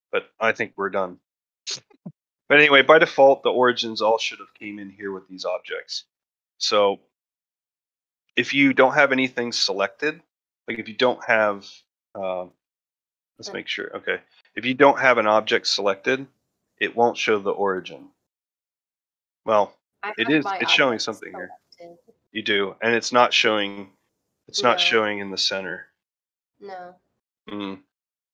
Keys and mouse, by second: 0.6-1.0 ctrl+shift+middle drag, 1.2 shift+middle drag, 1.6-1.9 middle drag, 2.2 middle drag, 2.6-2.9 ctrl+middle drag, 4.2 ctrl+middle drag, 7.9 ctrl+a, 8.0-8.3 ctrl+middle drag, 8.6 ctrl+middle drag, 9.0 ctrl+middle click, 9.3 shift+middle drag, 9.6 ctrl+middle drag, 9.9 middle click, 11.0 shift+middle drag, 11.5 click, 13.2-13.9 drag, 14.8 ctrl+middle drag, 17.9 a, 18.9 middle drag, 19.4 shift+middle drag, 20.1 click, 20.6 drag, 22.4 middle drag, 22.8 shift+middle drag, 23.2-23.5 ctrl+middle drag, 23.9 ctrl+middle drag, 24.3 shift+middle drag, 24.7 shift+middle drag, 25.1 ctrl+middle click, 25.4 ctrl+middle drag, 25.8 shift+middle drag, 27.1-27.4 ctrl+middle drag.